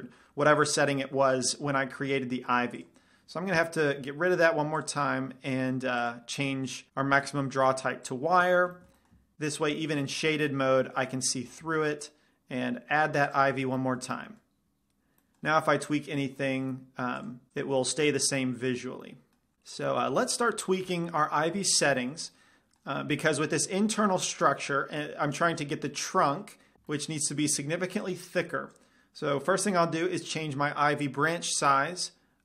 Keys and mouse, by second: 3.0 click, 3.8 x, 9.0-10.3 middle drag, 11.9 shift+a, 16.1-16.9 drag, 19.3 drag, 19.3 middle drag, 19.9-20.6 middle drag, 21.0-21.7 middle drag, 28.2-31.2 drag.